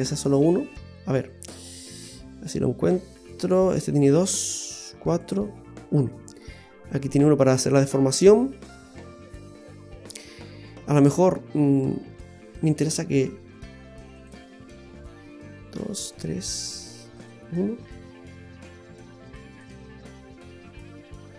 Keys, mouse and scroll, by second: 1.7 click, 5.2 click, 6.4 middle click, 8.2 middle click, 12.6 click, 14.1 click, 16.6 click, 17.2 click, 19.6 click.